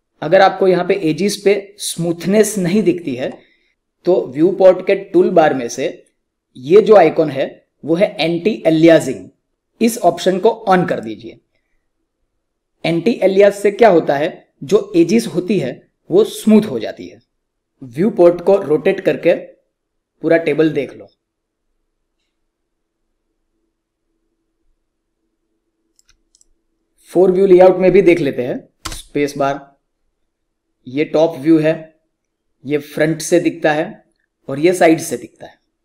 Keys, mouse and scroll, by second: 10.8 click, 18.2 alt+Num_Lock, 18.2 click, 18.5-26.2 alt+drag, 28.7 space.